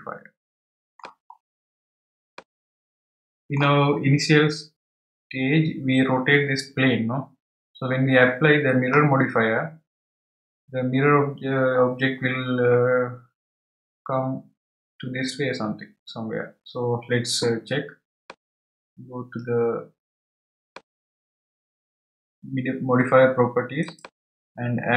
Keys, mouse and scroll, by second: 1.3-2.3 scroll down 3, 2.3-5.4 middle drag, 18.2-21.4 middle drag, 23.8 click.